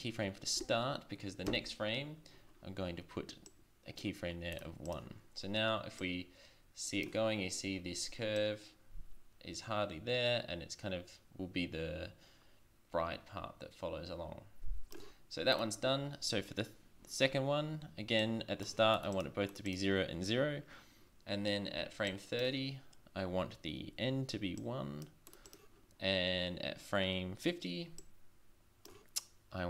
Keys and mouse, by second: 1.5 Right, 3.5-4.4 drag, 6.0 click, 8.4-9.3 drag, 15.5 right click, 21.3 drag, 22.1-23.4 drag, 24.6 click, 28.0 click.